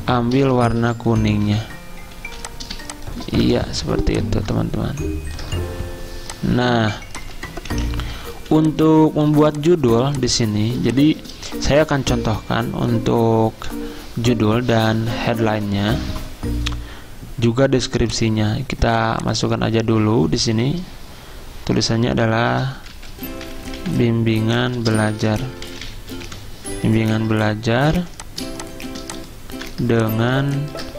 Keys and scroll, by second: 1.4 v, 3.2-4.0 typing, 7.0-8.8 typing, 22.2-25.6 typing, 26.9 Escape, 26.9-30.3 typing.